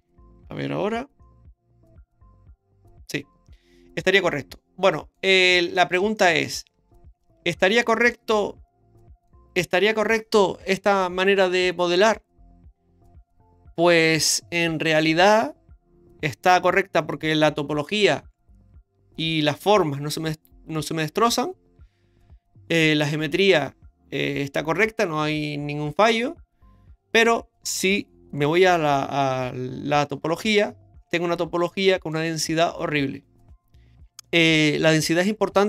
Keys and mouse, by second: 0.9 Tab, 1.2-5.1 middle drag, 5.8 shift+middle drag, 6.2-6.5 middle drag, 7.9 shift+middle drag, 8.4-9.3 middle drag, 28.7 Tab, 31.7 middle click.